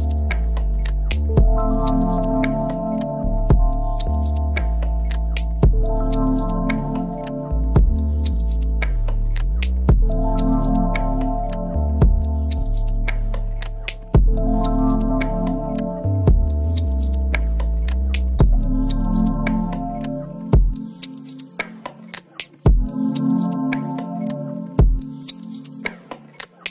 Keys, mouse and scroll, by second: 0.0 scroll up 1, 2.7 click, 3.5 middle click, 4.0 s, 4.5 click, 4.5 middle click, 5.1 s, 6.8-12.8 middle drag, 7.9 scroll up 1, 8.9 ctrl+r, 12.8-14.5 right drag, 14.5-17.0 middle drag, 17.0-18.4 drag, 18.4 middle click, 19.0 click, 20.6 middle click, 21.1 click, 21.4 middle click, 21.8 click, 22.4-26.7 middle drag, 23.3 ctrl+r.